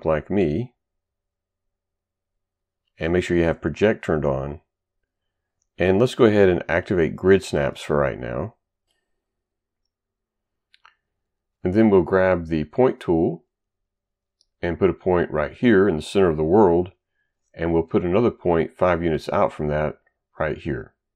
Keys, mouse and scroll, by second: 9.8 click, 12.1 click, 13.6 click, 15.6 click, 17.1 click, 20.6 click.